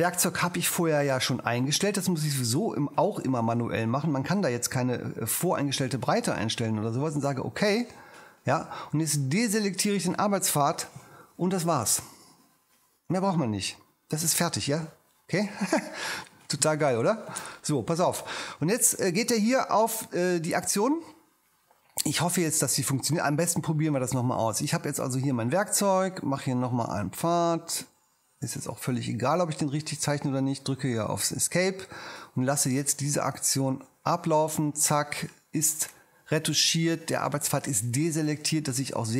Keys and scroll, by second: 30.7 ⟲.